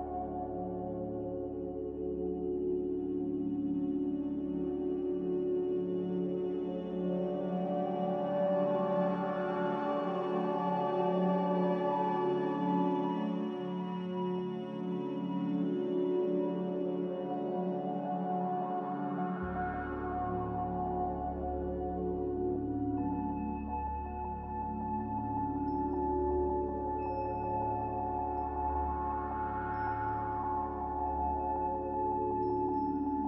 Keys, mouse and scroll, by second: 9.5 m, 10.8 b, 17.1 a, 18.6 click, 20.0 click, 20.7 ctrl+w, 21.0 click, 24.6 click, 25.0 right click, 26.1 click, 26.8 b, 30.3-31.7 typing, 31.7 Return.